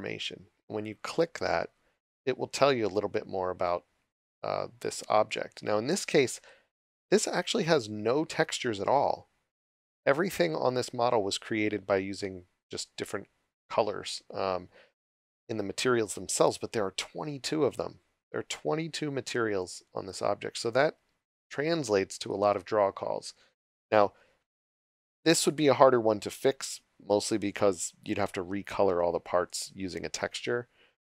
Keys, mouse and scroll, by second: 1.1 click, 24.6 click, 27.0 click.